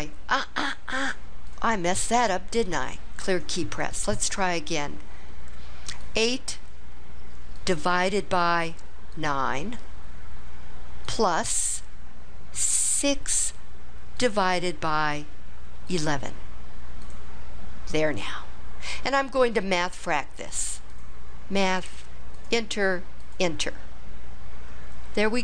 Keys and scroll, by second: 6.2 8, 7.6 /, 9.2 9, 13.0 6, 14.3 /, 16.4 1, 17.6 1, 22.4 Return, 23.3 Return.